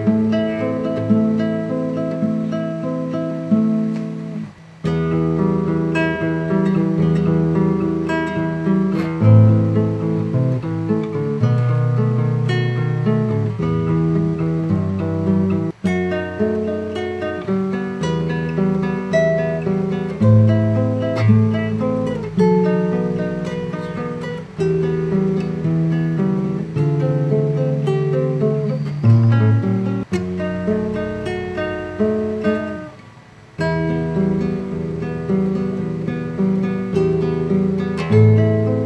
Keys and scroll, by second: 8.1 super+t.